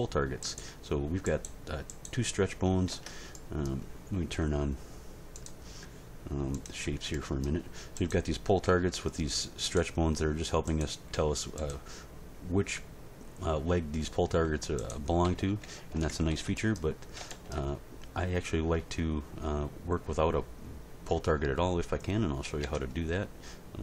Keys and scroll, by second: 2.9 Tab, 8.6 g, 11.1 g, 14.3 g, 15.3 a, 15.9 alt+r, 16.1 alt+g, 16.3 alt+s, 22.6 Tab.